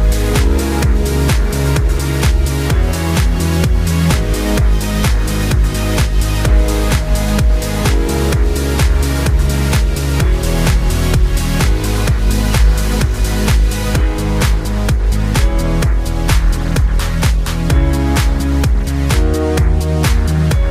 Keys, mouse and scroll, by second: 0.5 click, 0.6-1.1 scroll up 3, 1.4-1.8 scroll down 2, 1.8 click, 2.7 click, 2.8-4.1 scroll down 1, 4.4 click, 4.9 click, 5.2 scroll up 1, 5.4 e, 6.9 click, 7.9 click, 8.0-8.4 scroll down 3, 8.4 click, 9.6 shift+click, 10.2 shift+click, 10.9 e, 12.7 click, 13.2 click, 13.3 scroll up 3, 13.5 scroll down 4, 13.8 Tab, 14.2 click, 15.9-16.9 scroll down 4, 16.0 click, 16.4 ctrl+s, 16.9 scroll up 4, 17.1-17.5 scroll down 2, 17.5 click, 17.9 click, 19.0-20.7 drag.